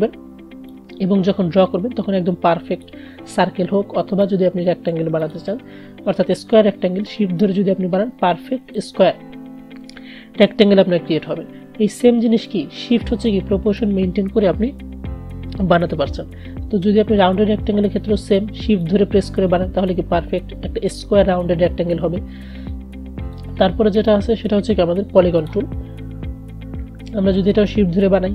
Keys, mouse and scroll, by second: 0.9-11.4 shift+drag, 12.7-15.9 drag, 17.1-22.5 drag, 23.4-28.3 drag.